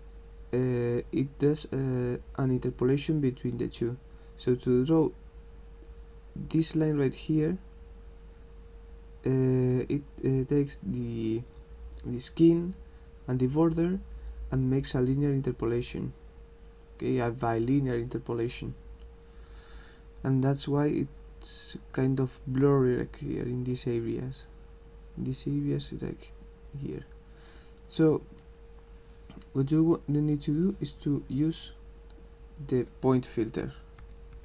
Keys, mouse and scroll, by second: 30.3 click.